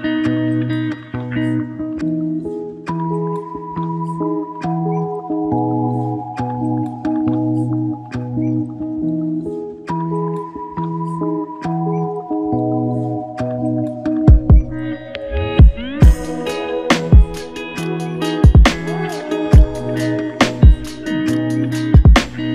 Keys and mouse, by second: 0.2 alt+click, 8.9-9.7 typing, 10.4 ctrl+click, 21.7 ctrl+click.